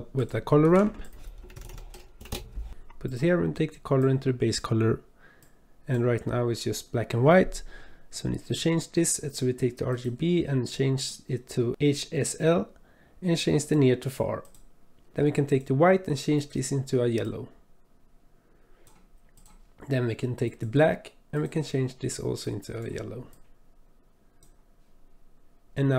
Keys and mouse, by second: 0.6 shift+a, 4.0-4.6 drag, 5.5 click, 9.9-11.7 drag, 13.6-14.7 drag, 15.1 ctrl+z, 15.5 click, 16.4 click, 20.5 click, 21.3 click.